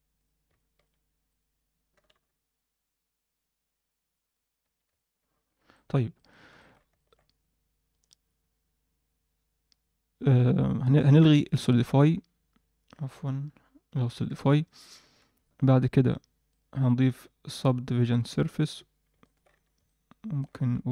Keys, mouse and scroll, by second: 0.5 middle click, 1.2 click, 1.9 g, 4.6 scroll down 1, 4.6 Tab, 4.9-5.3 middle drag, 5.7 middle drag, 6.1 middle drag, 6.5 alt+shift+middle click, 6.9 ctrl+alt+middle click, 7.9 click, 11.5 click, 13.0-14.1 alt+middle drag, 14.6 middle click, 15.0 shift+middle click, 16.4 drag, 17.4-18.4 drag, 19.2 middle click, 19.5 z, 19.8 middle click, 20.5 z.